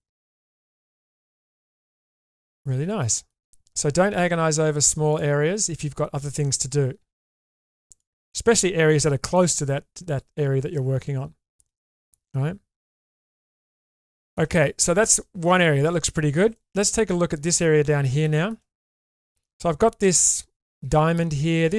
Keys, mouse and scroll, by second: 1.0 g, 3.0 middle click, 4.2 1, 5.1 click, 7.0 g, 9.3-11.5 middle drag, 12.0 click, 12.9 shift+middle click, 13.6 middle click, 14.1 shift+middle click, 15.2 shift+middle click, 16.1 middle click, 16.5 shift+middle click, 18.2 shift+middle click, 18.7 middle click.